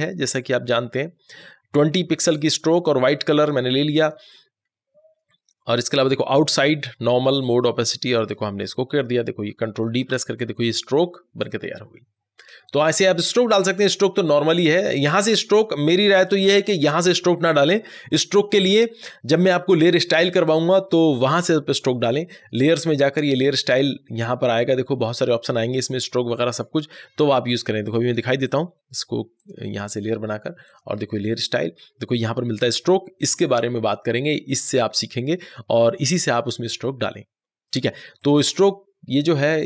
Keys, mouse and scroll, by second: 2.3 click, 8.0 click, 8.0 click, 9.9 ctrl+d, 23.2 ctrl+d, 23.2 click, 27.7 click, 27.8 click, 38.0 click, 38.2 click.